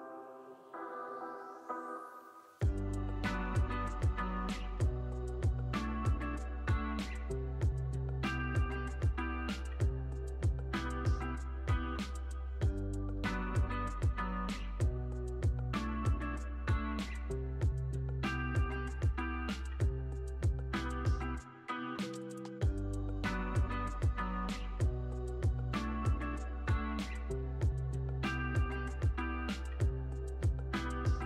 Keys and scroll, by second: 3.3 x, 5.5 super+c, 5.6 super+v, 6.3 x, 8.0 super+v, 9.0 x, 13.9 x, 18.4 z, 19.5 x, 20.5 z, 21.8 x, 23.9 super+c, 24.2 x, 25.5 super+v, 26.2 x, 30.3 super+c, 30.5 super+v.